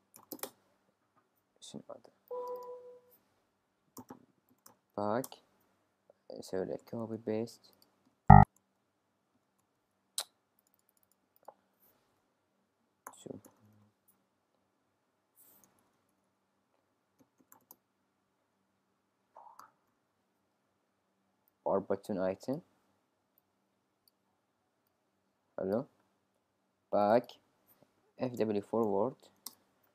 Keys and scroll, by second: 0.0-1.3 typing, 3.7-5.2 typing, 5.2 Return, 6.8 super+c, 7.0 super+v, 8.1 super+c, 8.4 super+v, 13.0-15.8 typing, 17.0-21.7 typing, 27.9-29.8 typing.